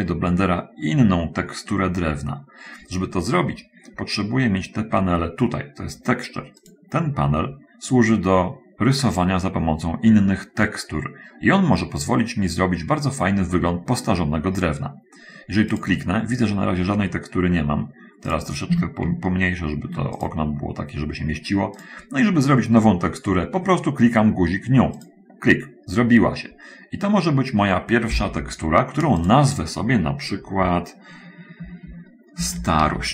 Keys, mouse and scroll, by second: 4.8 scroll down 1, 6.6 click, 7.7 scroll up 1, 8.8-9.2 scroll up 1, 15.8 click, 19.6 ctrl+middle click, 20.1 ctrl+click, 22.0 click, 25.4 click, 29.1 click, 32.8-33.1 typing.